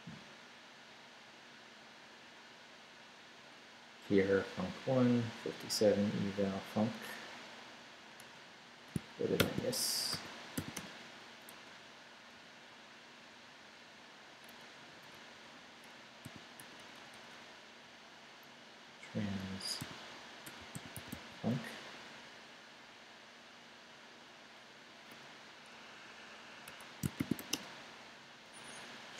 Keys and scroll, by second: 8.2 Return, 8.9 shift+Return, 9.4 shift+;, 10.1 shift+5, 10.6 7, 10.7 Return, 11.5 Left, 11.6 Right, 14.9 Right, 16.2 i, 16.6 BackSpace, 19.8-21.6 typing, 26.7 Escape, 26.9-27.9 typing.